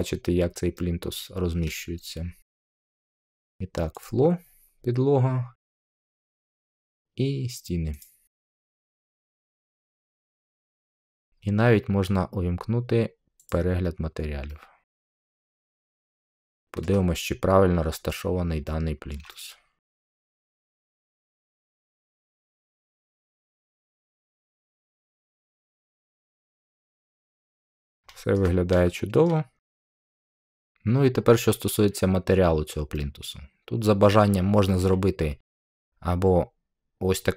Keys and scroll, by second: 25.0 •.